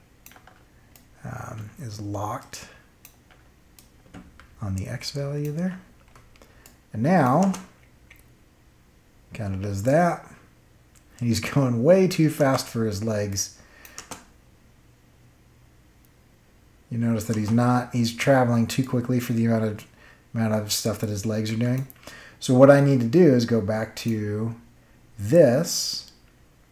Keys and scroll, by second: 7.4 space, 12.3 space, 17.2 space.